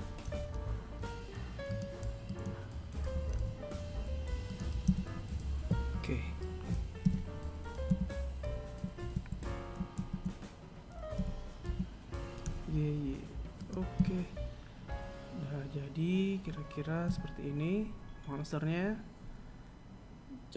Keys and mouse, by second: 0.2 right click, 1.0 g, 2.8 s, 7.8 z, 9.0 g, 11.8 a, 15.0 KP_1.